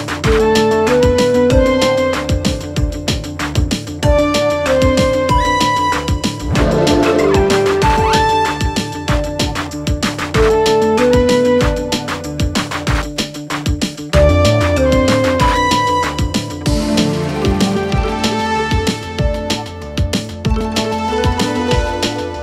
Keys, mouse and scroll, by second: 1.3 click, 12.6 click, 14.7 click, 20.3-22.4 typing.